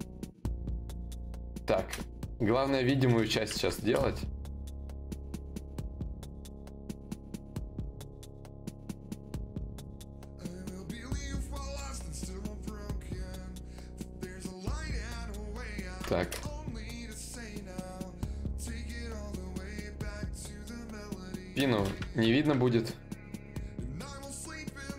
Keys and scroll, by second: 0.4 shift+d, 3.2 ctrl+z, 4.0 x, 11.6 x, 16.4 d, 18.8 ctrl+z, 24.0 d.